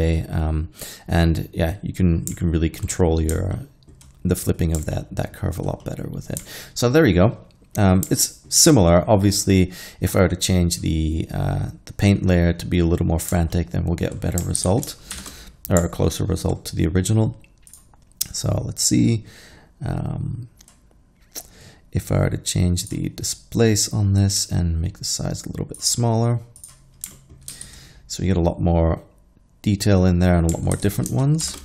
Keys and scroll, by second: 14.7 alt+a, 15.2 shift+Left, 27.6 alt+a, 30.8 alt+a, 31.5 shift+Left.